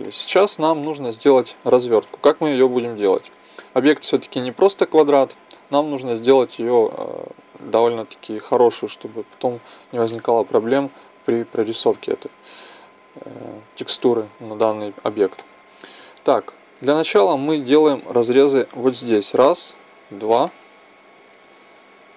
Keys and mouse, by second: 0.1-3.8 middle drag, 3.8-13.9 drag, 13.9 Tab, 18.9-20.6 right drag.